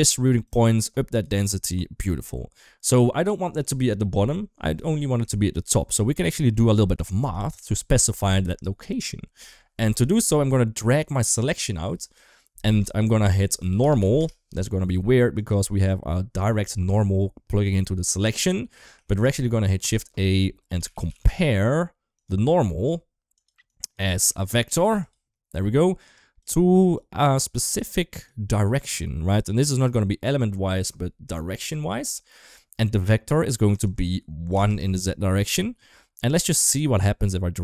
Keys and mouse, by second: 0.3 click, 1.9 shift+middle click, 2.9-3.3 middle drag, 3.8 KP_1, 5.3 shift+middle click, 6.2 shift+middle click, 9.3 middle click, 10.6 click, 11.0-15.3 drag, 16.7 shift+middle click, 18.9 shift+a, 22.4 click, 23.1 click, 23.5 click, 24.2-25.0 drag, 26.0 click, 26.7-27.3 drag, 27.6-28.1 drag, 29.6-31.3 drag, 33.5-34.6 drag, 36.2-37.6 drag.